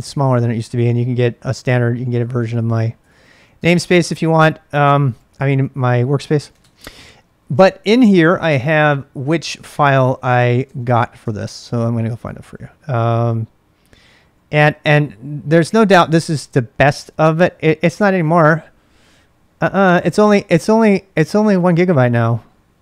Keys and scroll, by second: 0.3-16.6 typing, 14.8 Return.